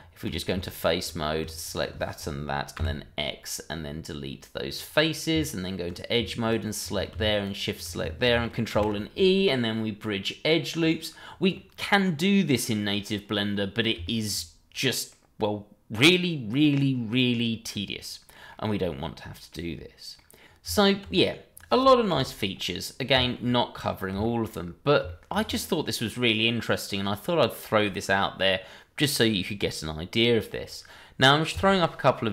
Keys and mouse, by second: 0.7 alt+click, 1.6 shift+click, 2.7 x, 5.3 Tab, 6.5 alt+click, 7.4 alt+shift+click, 8.7 ctrl+e, 11.5-13.1 middle drag, 13.5 middle drag, 14.0 shift+middle drag, 15.1-18.3 middle drag, 18.5-19.5 middle drag, 20.1 middle drag, 20.4 Tab, 22.1 Delete, 23.1 shift+middle drag, 23.5-24.1 middle drag, 24.2 shift+middle drag, 25.0 shift+middle click.